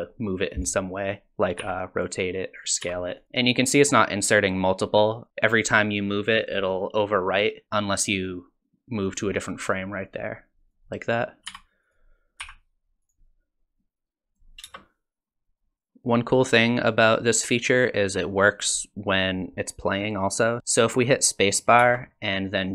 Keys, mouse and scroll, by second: 0.0 click, 1.6 r, 2.8 s, 8.3 click, 10.2 click, 11.5 s, 12.4 r, 13.8 click, 14.6 space, 20.6 ctrl+z, 20.6 space, 21.8 space.